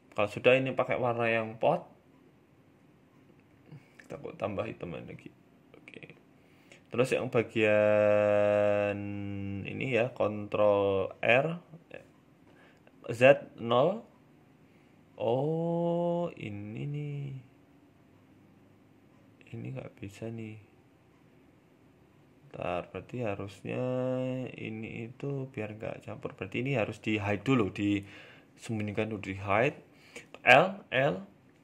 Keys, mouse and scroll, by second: 0.3 click, 2.7 middle click, 3.7 click, 5.1 shift+middle click, 5.5 middle click, 6.2 right click, 6.3 Tab, 6.7 middle click, 7.5 middle click, 8.5 ctrl+r, 12.2 middle click, 12.2 s, 12.8-13.1 scroll up 1, 13.1 middle click, 13.5 scroll up 1, 13.9 middle click, 14.5 scroll down 2, 14.9 middle click, 15.6 scroll up 1, 15.9 shift+middle click, 17.8 g, 20.7 k, 22.9 middle click, 24.4 middle click, 25.4 middle click, 26.4 shift+middle click, 26.7 shift+middle click, 28.2 shift+middle click, 28.7-31.1 typing, 31.3 middle click.